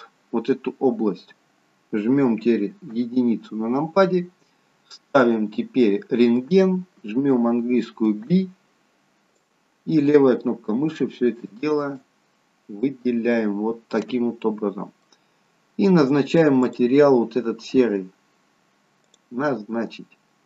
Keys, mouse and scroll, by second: 0.4 scroll up 1, 3.0 KP_1, 5.2 click, 8.2 b, 12.9 middle click, 16.7 click.